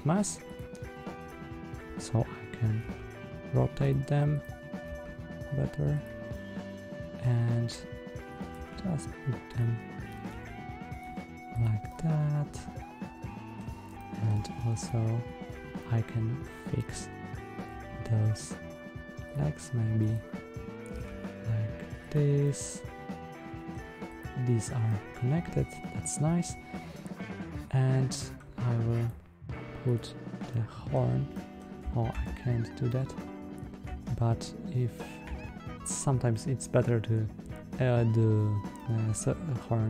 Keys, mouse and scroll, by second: 0.4 drag, 1.1 click, 2.7 r, 4.2 click, 4.7 r, 5.9 click, 6.2-7.6 middle drag, 8.2 click, 8.4 g, 9.9 click, 10.1 g, 10.8 click, 11.4 drag, 11.7-13.4 middle drag, 13.9 middle click, 14.7 click, 15.7-16.3 middle drag, 17.5 r, 19.2 click, 19.9 click, 20.8 r, 22.0 click, 22.3-23.6 middle drag, 24.0 click, 24.7-28.2 middle drag, 28.9 click, 29.8 click, 30.4-30.8 middle drag, 31.2 middle click, 32.0 Tab, 32.8-34.3 middle drag, 35.2 Tab, 38.6-39.1 middle drag.